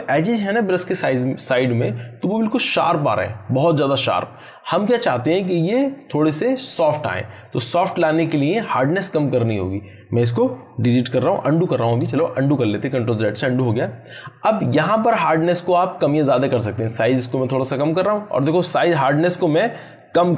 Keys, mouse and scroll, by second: 10.9 ctrl+Num_Lock, 11.1 ctrl+z, 15.2-17.6 drag, 19.5-20.3 drag.